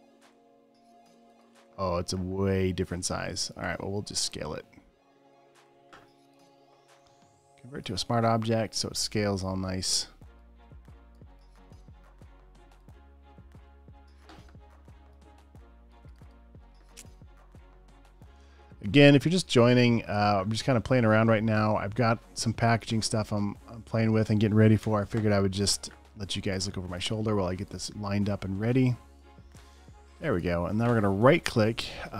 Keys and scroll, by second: 9.5 super+t, 16.2 space, 16.8 super+space, 20.1 space, 20.6 space, 25.3 Return, 25.9 super+a, 29.7 super+d.